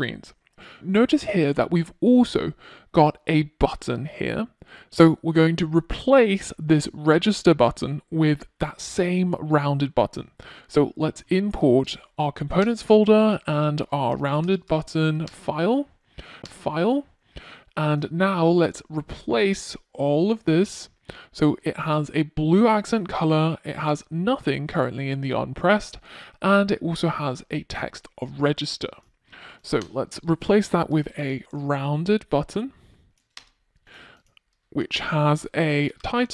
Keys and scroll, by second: 10.0 Return, 30.7 Return.